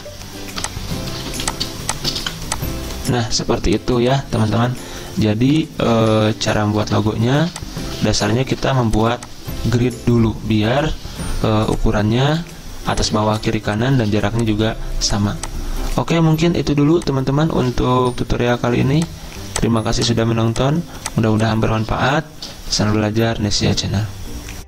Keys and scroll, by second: 0.0-5.0 typing, 10.6-11.8 typing, 14.0-14.7 typing, 18.0 ctrl+g, 21.2-23.2 typing.